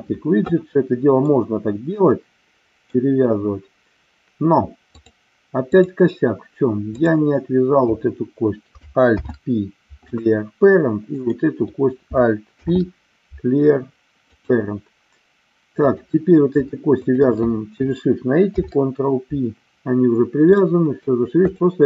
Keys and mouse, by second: 1.2-2.9 middle drag, 4.9 click, 9.1 alt+p, 11.1 click, 12.5 alt+p, 15.9 click, 17.0 shift+click, 18.4 ctrl+p, 20.6 middle click, 21.5 click.